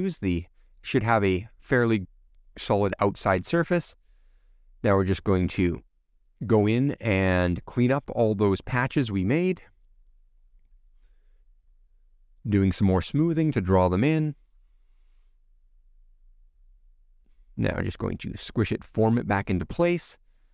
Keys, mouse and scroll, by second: 0.6 click, 0.7-1.5 scroll down 1, 4.4-4.8 scroll down 2, 4.8 middle click, 5.7-7.8 scroll down 4, 7.8 middle click, 15.5 middle click, 16.6 shift+click, 18.5 click, 19.0 click, 19.5 click, 20.3 click.